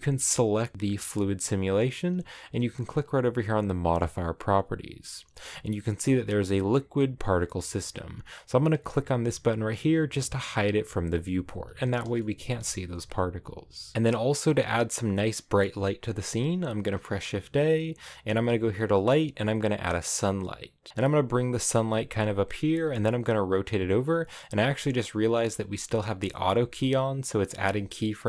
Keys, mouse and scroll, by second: 10.7 click, 12.1 shift+middle click, 12.5 a, 20.5-20.9 scroll down 4, 20.9 g, 22.6 r, 23.5 r, 24.9 r, 25.3 r, 26.3 r, 27.7 r.